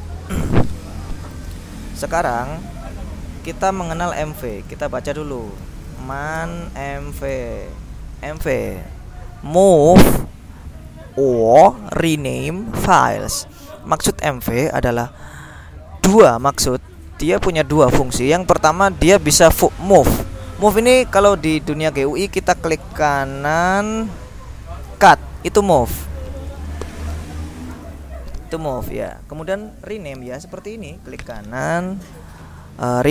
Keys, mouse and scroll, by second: 0.0-1.3 drag, 2.2 click, 4.0 m, 4.3 v, 4.5 BackSpace, 5.7 ctrl+l, 5.9 ctrl+m, 6.2 ctrl+a, 6.3 ctrl+n, 6.4 ctrl+space, 6.9 ctrl+m, 7.1 ctrl+v, 7.3 ctrl+Return, 9.4 click, 11.9 click, 12.8-14.0 drag, 14.1-16.3 drag, 17.7-19.0 drag, 19.1 click, 22.1 click, 22.9 right click, 26.1 click, 28.0 alt+Tab, 29.3 click, 30.4 alt+Tab, 31.2 right click.